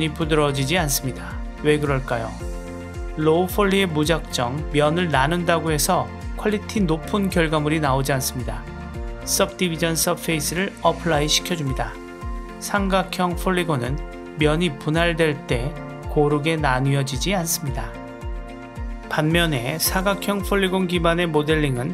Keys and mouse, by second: 8.9-10.4 drag, 11.1 Tab, 14.2-17.7 middle drag, 18.8 click, 19.6 click, 20.0 Tab, 20.1 drag, 20.3 click, 20.8 KP_Decimal.